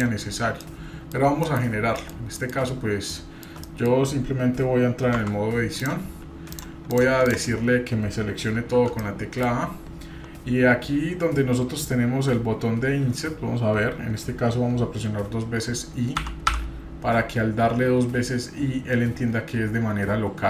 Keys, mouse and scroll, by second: 0.6 middle click, 2.0 middle click, 2.1 scroll down 1, 2.3 middle click, 2.7-3.5 scroll down 2, 3.1 middle click, 3.6 middle click, 5.2 Tab, 5.8-6.6 drag, 6.9 click, 7.3 click, 8.5 a, 9.0-9.4 middle drag.